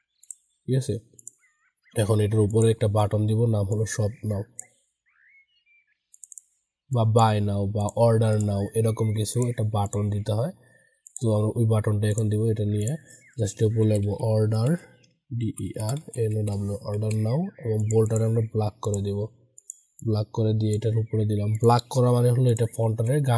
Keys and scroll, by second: 16.9 ctrl+a, 22.8 ctrl+a.